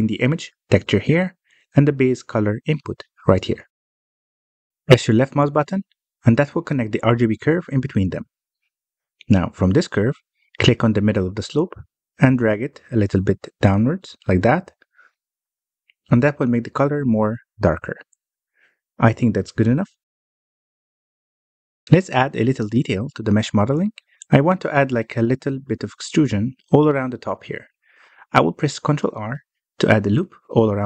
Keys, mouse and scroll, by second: 5.8-6.3 scroll up 3, 6.3-9.3 middle drag, 13.1-14.9 drag, 14.9-15.7 scroll up 1, 15.7-17.8 middle drag, 17.8-19.0 drag, 19.0-22.0 middle drag, 23.8-24.1 shift+middle drag, 24.1 scroll up 2, 24.5 click, 25.3-30.8 middle drag.